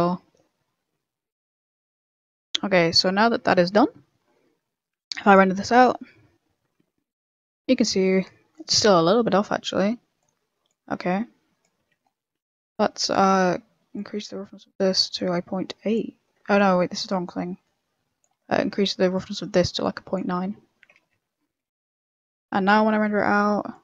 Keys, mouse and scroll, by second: 1.8 click, 3.3 a, 3.7 a, 4.9 click, 10.1 click, 11.2 click, 11.7 n, 12.0-12.8 scroll up 7, 12.3 middle click, 12.9 middle click, 13.9 click, 15.3 click, 18.3 click, 18.3 middle click, 19.1 click, 19.8 ctrl+click, 23.0 click.